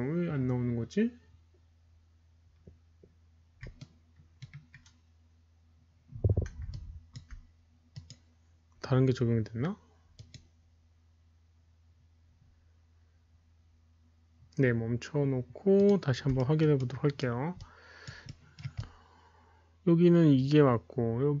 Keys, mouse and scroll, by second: 0.2 Return, 0.2 KP_1, 0.2 KP_Decimal, 1.6 Return, 3.7-4.3 alt+middle drag, 6.2 alt+middle click, 7.2 alt+click, 7.2 alt+middle click, 10.8 alt+click, 10.8 alt+middle click, 12.7 alt+click, 12.7 alt+middle click, 14.6 alt+click, 15.7 click, 16.3 alt+middle drag, 16.8-17.4 alt+right drag, 16.8 alt+click, 17.1 alt+middle click, 17.5-18.0 alt+drag, 17.5 alt+middle click, 18.2-18.5 alt+middle drag, 18.7-21.4 alt+drag, 18.8 alt+right click.